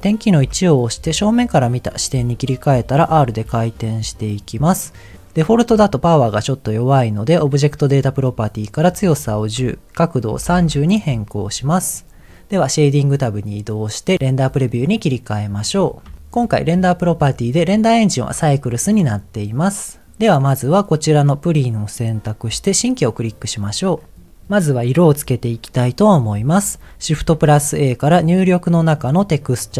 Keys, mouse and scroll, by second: 0.4 KP_1, 3.0 r, 4.3 click, 6.8 click, 8.1 click, 8.9-10.7 drag, 12.9 click, 15.1 click, 15.7-16.1 scroll up 2, 16.1 shift+middle click, 16.2 scroll down 1, 16.6 click, 21.0 click, 22.7 click, 23.6-24.3 scroll down 5, 25.8 click, 27.1 shift+a.